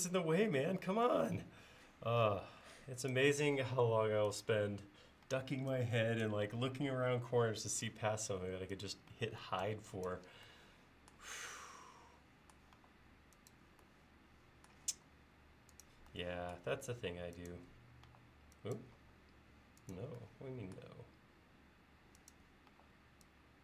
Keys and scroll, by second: 1.8 l, 5.3 e, 6.5 l, 9.1 e, 12.8 e, 14.9 l, 18.1 e, 22.8 e.